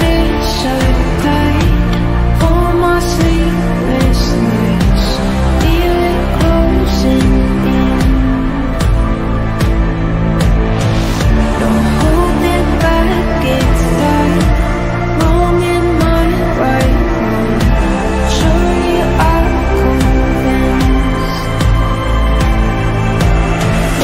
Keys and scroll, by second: 14.1 F3, 17.2 ctrl+z.